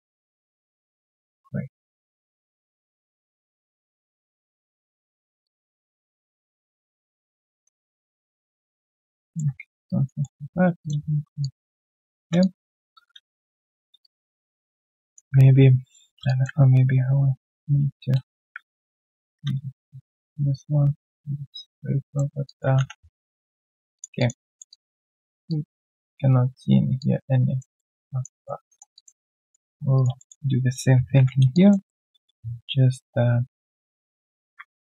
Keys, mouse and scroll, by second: 0.5 ctrl+shift+click, 3.4 ctrl+shift+click, 5.4 ctrl+shift+click, 8.2 ctrl+shift+click, 9.6 alt+right click, 10.2 alt+middle click, 11.4 ctrl+shift+click, 12.4 alt+click, 13.4 right click, 14.0 alt+click, 15.4 ctrl+z, 15.8 ctrl+z, 16.2 alt+click, 16.5 ctrl+z, 18.9 1, 22.4 alt+click, 22.7 3, 22.9-23.3 scroll down 3, 23.3 right click, 24.1 alt+click, 24.4 alt+middle click, 24.7 alt+click, 25.0 alt+middle click, 25.3 alt+right click, 25.4 alt+click, 26.9 alt+click, 27.7 alt+middle click, 28.0 alt+click, 28.4 alt+middle click, 28.9 alt+click, 29.1 alt+right click, 29.4 alt+click, 29.9 alt+right click, 30.1 alt+middle click, 31.1 ctrl+shift+x, 31.5 alt+click, 32.1 alt+middle click.